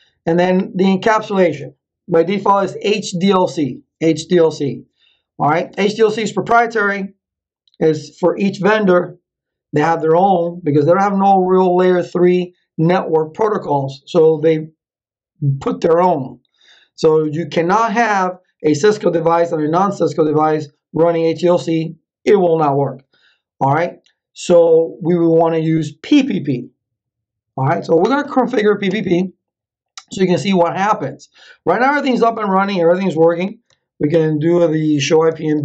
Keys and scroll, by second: 34.1 ctrl+c, 34.7-35.6 typing.